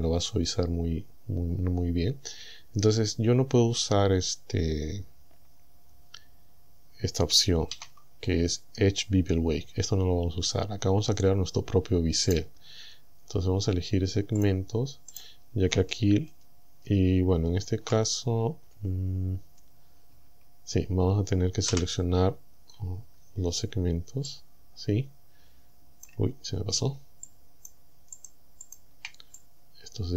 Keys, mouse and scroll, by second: 1.8-2.2 scroll down 2, 7.7 ctrl+e, 12.3 right click, 14.5 click, 15.2 right click, 21.7 ctrl+shift+c, 22.7 scroll down 2, 23.2-23.9 scroll up 4, 24.3-26.3 drag, 27.3 shift+click, 28.2 shift+click, 28.7 shift+click, 29.4-30.1 drag.